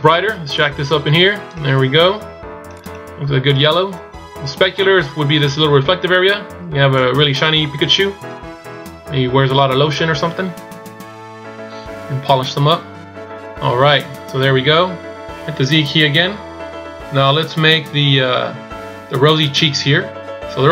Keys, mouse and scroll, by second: 7.0 click, 12.7-13.6 scroll down 2, 13.6-15.0 scroll up 1, 16.3 z.